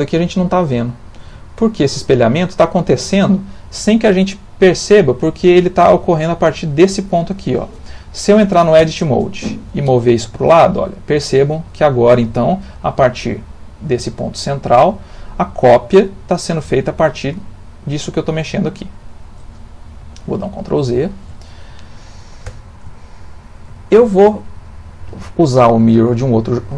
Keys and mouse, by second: 1.5 shift+middle click, 2.1 ctrl+middle click, 8.8 Tab, 9.8 g, 17.1 g, 20.9 ctrl+z, 22.4 Tab, 23.0 ctrl+middle click, 23.7 shift+middle click, 24.6 ctrl+middle click.